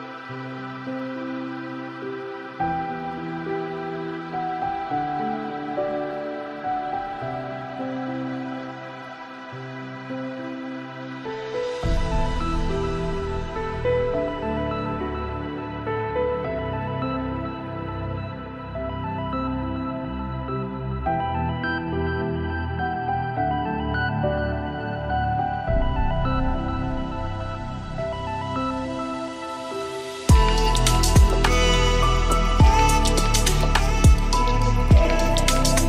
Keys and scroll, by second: 5.7 ctrl+space.